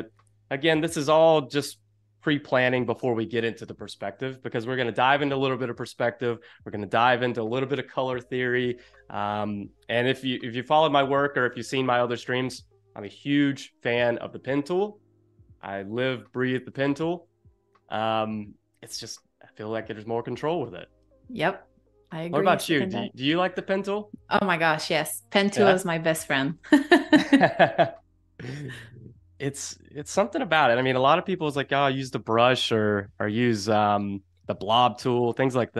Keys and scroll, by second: 2.3 space, 27.5 shift+super+o, 30.1 space.